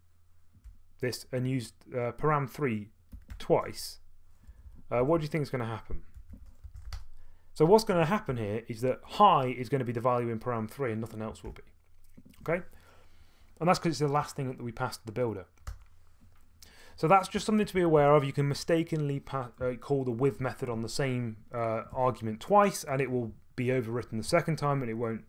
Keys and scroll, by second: 2.9-7.3 typing, 11.4 F2, 15.7 Return, 17.1-18.5 typing.